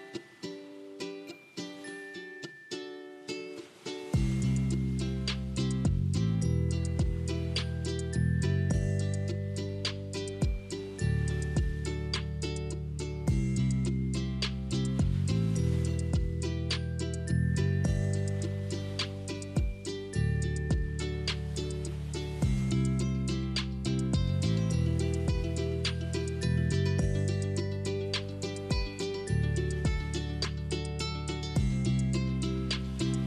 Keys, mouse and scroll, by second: 2.2 click, 6.0 click, 6.2-7.9 middle drag, 7.9-8.4 scroll up 2, 8.4-10.4 middle drag, 11.1-13.0 middle drag, 13.0 click, 14.0 click, 15.7 middle click, 16.5 shift+r, 17.0 Tab, 18.6 ctrl+r, 22.2 click, 23.1 3, 23.3 click, 24.0-26.4 middle drag, 26.4 e, 32.2 Tab.